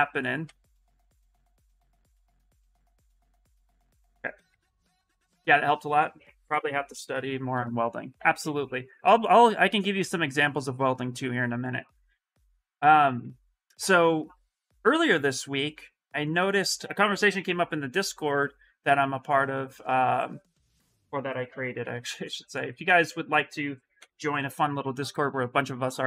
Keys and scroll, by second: 0.2 ctrl+z, 0.8 ctrl+z, 1.3 ctrl+z, 1.6 ctrl+z, 2.0 ctrl+z, 2.6 ctrl+shift+z, 3.2 ctrl+shift+z, 3.9 shift+f, 4.3 ctrl+z, 21.4 ctrl+c, 21.6 ctrl+c, 23.7 ctrl+v, 24.4 Return.